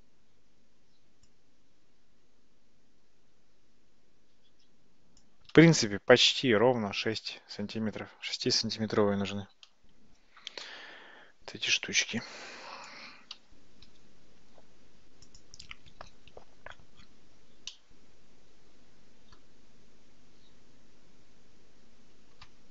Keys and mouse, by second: 1.3-5.3 drag, 12.2 click, 13.4 x, 15.4 click, 17.8-19.4 middle drag.